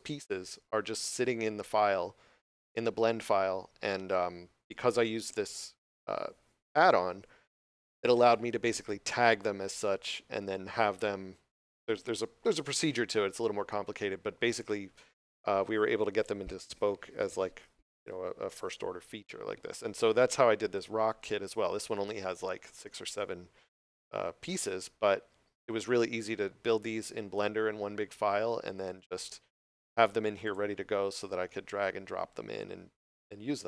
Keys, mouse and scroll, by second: 20.6 click, 23.4 scroll down 1, 24.9 scroll up 1, 30.3 click.